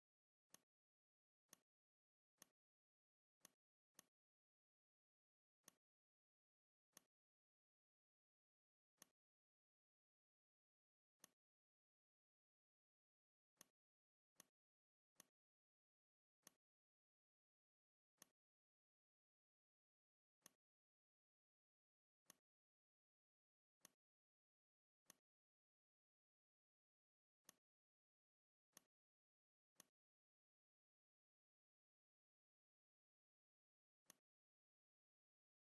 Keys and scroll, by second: 1.3 space, 8.7 r, 10.1 v, 14.8 z, 15.7 v, 33.4 space.